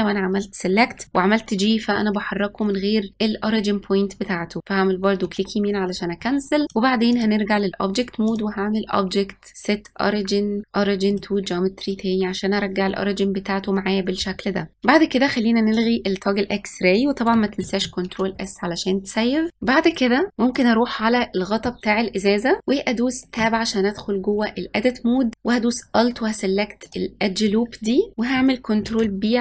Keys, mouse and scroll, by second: 1.0 g, 6.6-9.8 drag, 13.1-14.7 scroll up 2, 14.7 middle click, 15.6-17.5 drag, 17.5 ctrl+s, 19.7 click, 20.3 scroll up 3, 20.5 click, 23.3 Tab, 26.7 alt+click, 28.8 ctrl+b.